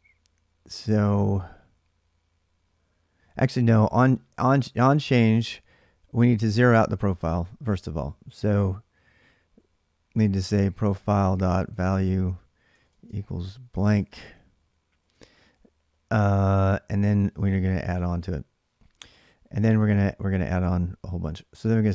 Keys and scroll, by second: 3.5 j, 3.7 j, 6.5 o, 9.9-15.2 typing, 15.0 ctrl+[, 17.1 k, 17.3 k, 19.2-20.0 typing.